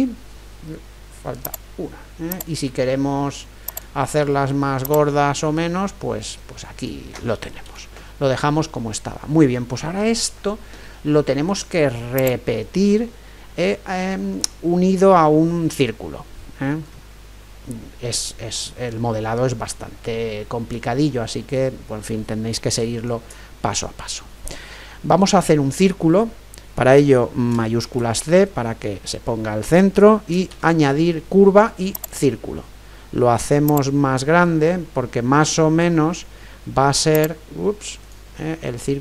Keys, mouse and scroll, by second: 7.6 ctrl+z, 8.2-11.6 middle drag, 12.1-16.2 drag, 13.1-19.7 middle drag, 21.3-25.4 middle drag, 27.8 shift+c, 28.5-30.4 middle drag, 30.5 shift+a, 33.7-35.6 drag, 37.1-39.0 drag, 38.7-39.0 middle drag.